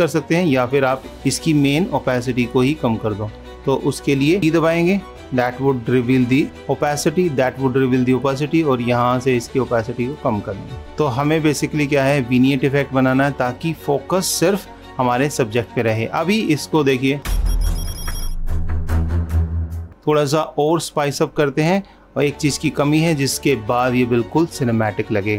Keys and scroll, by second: 10.8 super+-, 22.6 ctrl+s.